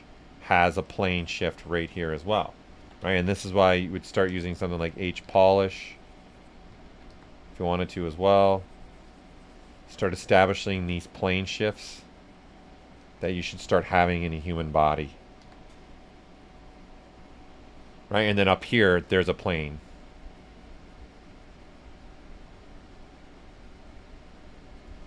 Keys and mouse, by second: 0.0-0.3 typing, 0.5 alt+click, 3.9 h, 4.3 click, 5.2 s, 5.3 click, 6.7 ctrl+z, 7.1 s, 7.2-10.3 drag, 10.3 click, 11.4-13.5 drag, 13.5-15.4 drag, 15.4 s, 15.4-17.6 drag, 18.0 right click, 18.8-25.0 drag.